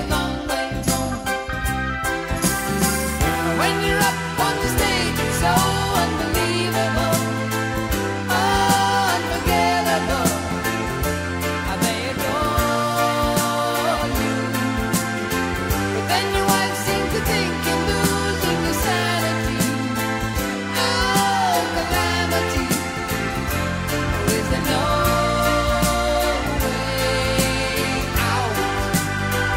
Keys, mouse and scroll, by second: 2.3 middle click, 2.8 shift+a, 3.9-5.1 right drag, 6.1-10.2 right drag, 7.0-16.4 drag, 7.0-10.2 middle drag, 15.9 ", 17.3-17.6 middle drag, 18.0-19.1 middle drag, 19.1 z, 21.4-24.8 middle drag, 23.4 s, 25.2 click, 27.7-28.7 drag, 28.8-29.5 drag.